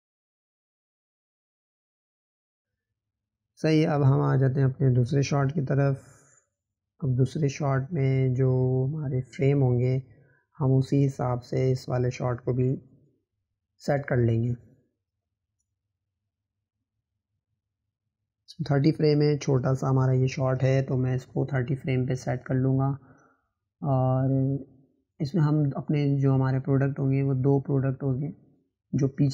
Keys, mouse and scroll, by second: 0.0 click, 2.6 scroll down 2, 2.8-3.9 middle drag, 3.9 click, 5.0 click, 20.8-22.4 drag.